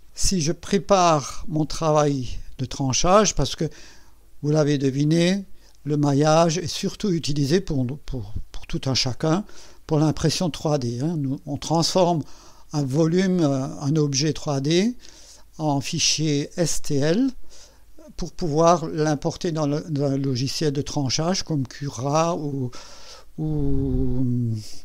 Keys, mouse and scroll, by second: 0.8 click.